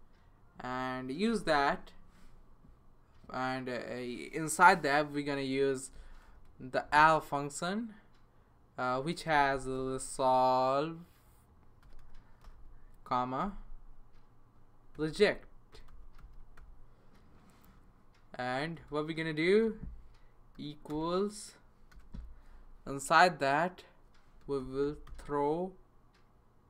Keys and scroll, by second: 1.0-1.8 typing, 8.0 typing, 9.0-10.2 typing, 11.6-17.0 typing, 18.4 Right, 18.8 space, 19.6 =, 20.6 >, 20.9 space, 21.9 {, 24.1-25.6 typing.